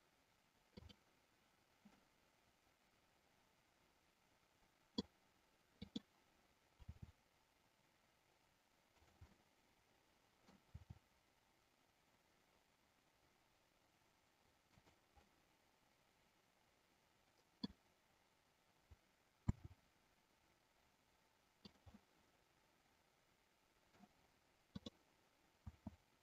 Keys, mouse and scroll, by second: 0.7 click, 2.0-5.0 middle drag, 5.9 click, 6.7 r, 9.0 click, 9.2-10.6 middle drag, 10.7 r, 14.7 click, 15.3-17.7 middle drag, 19.5 s, 22.0-24.0 middle drag, 22.0 scroll up 1, 24.7 click, 25.6 s.